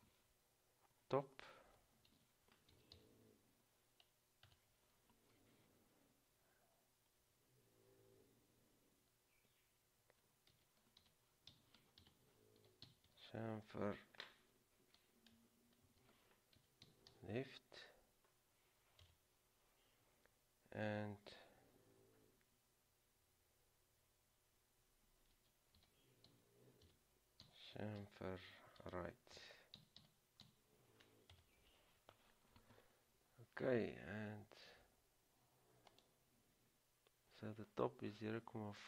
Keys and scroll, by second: 0.0-0.2 typing, 2.3-3.6 typing, 4.6 Return, 10.7-13.7 typing, 16.0-17.8 typing, 19.2 typing, 25.5-31.1 typing, 31.5 Return, 34.0 typing.